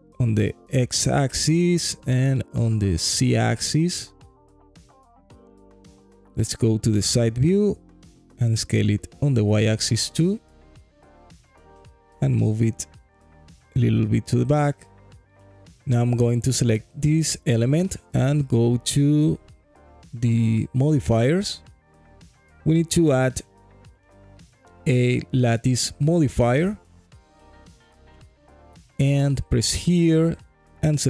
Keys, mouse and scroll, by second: 0.2 z, 2.2 click, 2.7 s, 2.9 z, 6.7 click, 7.6 KP_3, 8.7 s, 9.7 y, 12.2 click, 12.7 g, 12.9 y, 14.6 click, 15.1 alt+click, 16.1 click, 19.2 click, 23.2 click, 24.3 click, 25.3-28.3 drag, 30.4 click.